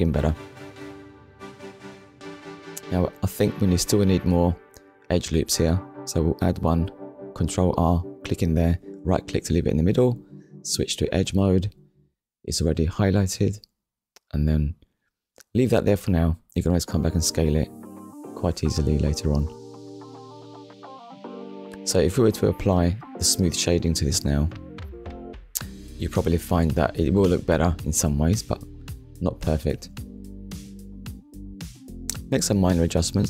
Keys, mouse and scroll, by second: 1.4 click, 4.4 ctrl+r, 6.4 click, 7.9 right click, 9.7 click, 10.8 middle click, 11.9 scroll down 1, 12.8 middle click, 17.5 Tab, 18.1 click, 18.3 middle click, 21.6 KP_1, 22.4 scroll up 1, 22.9 click, 23.3 Tab, 24.3 middle click, 25.5 KP_1, 26.2 scroll up 1, 29.1 alt+click.